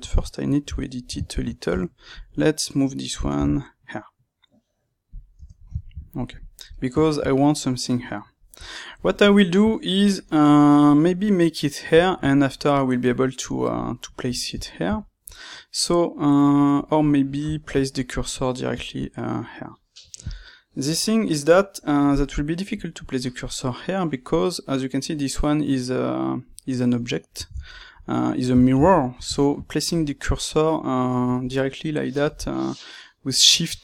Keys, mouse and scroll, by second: 1.7 Tab, 2.0 click, 2.3-5.4 middle drag, 3.3 g, 5.0 click, 5.4 Tab, 5.7-33.8 ctrl+middle drag.